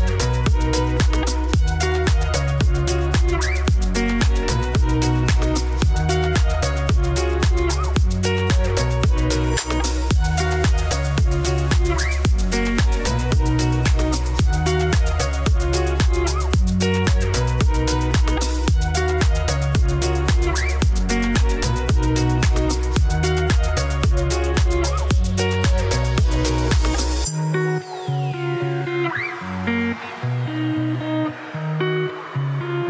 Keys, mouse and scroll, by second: 0.1 Tab, 0.2 s, 0.9 Tab, 1.2 KP_1, 1.7 shift+middle click, 2.0 scroll up 3, 2.6 g, 4.3 Tab, 4.9 e, 7.4 s, 8.4 s, 9.6 s, 11.2 2, 12.1 g, 18.4 ctrl+alt+shift+s, 23.1 ctrl+z, 23.5 f, 25.5 scroll down 1, 25.6 shift+middle click, 26.0 ctrl+r, 26.5 middle click, 26.7 3, 26.9 Left, 27.6 KP_2, 27.8 KP_3, 28.2 s, 31.6 ctrl+r, 32.3 s.